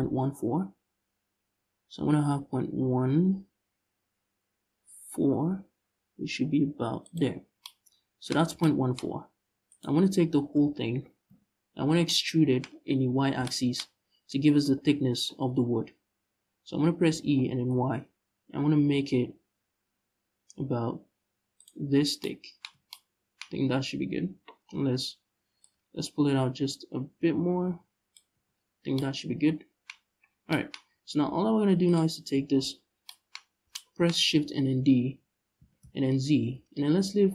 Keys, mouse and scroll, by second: 7.1 scroll down 1, 8.0 scroll up 1, 8.7-9.4 scroll up 1, 9.4 right click, 11.0 KP_Decimal, 12.3-12.9 scroll up 1, 12.9 scroll down 1, 13.5-14.7 scroll up 1, 16.8 e, 21.3 shift+click, 21.6 scroll down 1, 22.3 Tab, 23.1-23.7 scroll up 1, 24.0 Tab, 25.2-31.5 drag, 28.0 Tab, 28.2-28.6 scroll down 2, 29.6-30.2 scroll up 1, 30.4 scroll up 1, 30.5 Tab, 30.8-31.5 scroll down 1, 31.5 right click, 32.4 scroll down 1, 33.1 scroll up 1, 33.8-35.2 scroll up 2, 35.2 shift+d.